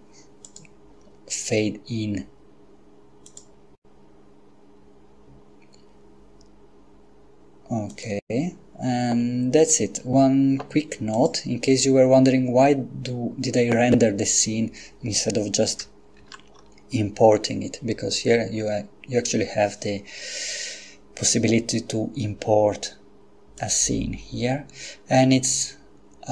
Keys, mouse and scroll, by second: 0.5 click, 3.4 click, 8.1 click, 11.1 click, 16.2 shift+a, 23.6 click.